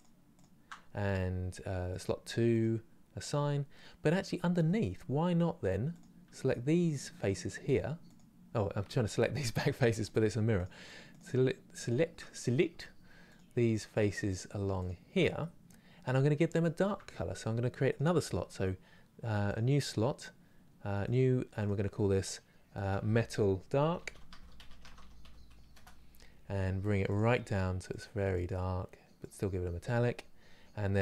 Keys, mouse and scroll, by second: 2.2-3.4 drag, 3.4-4.9 middle drag, 4.9 scroll up 2, 5.6 click, 7.4 shift+click, 8.6-9.7 middle drag, 9.7 shift+click, 10.2 shift+click, 15.1-19.2 middle drag, 19.2-21.4 drag, 25.4-27.5 drag, 30.8 click.